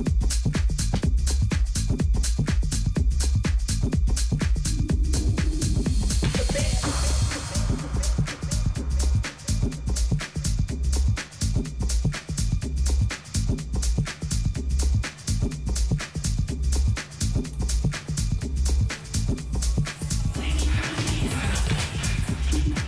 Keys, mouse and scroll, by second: 0.6 Tab, 1.5 z, 3.1-4.7 middle drag, 3.9 t, 5.5-7.3 drag, 6.4-11.2 middle drag, 13.1-15.6 middle drag, 22.5-22.8 middle drag.